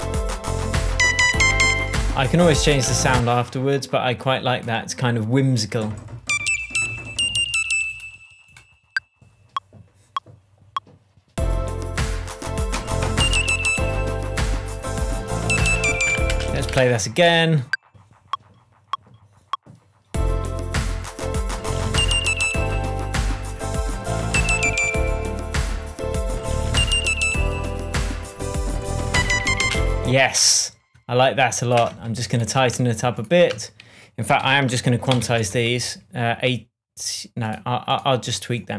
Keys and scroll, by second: 3.1 space, 16.7 space, 17.1 super+z, 30.0 space, 32.1 BackSpace, 34.8 super+a, 35.3 shift+super+a, 35.5 shift+super+u.